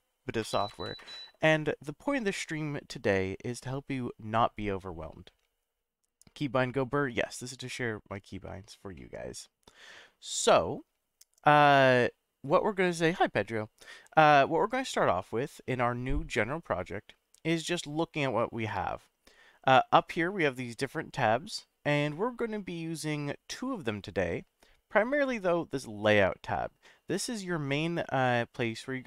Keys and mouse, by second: 8.9-9.9 middle drag, 15.3-16.0 middle drag.